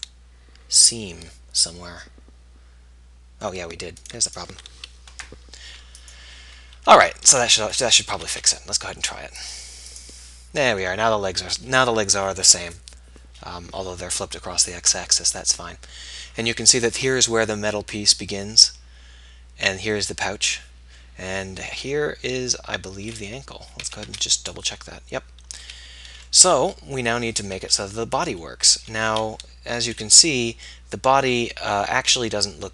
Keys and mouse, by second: 4.2-5.5 middle drag, 8.3 a, 8.7 a, 24.0 a, 24.2 b, 25.8 a, 29.2 a.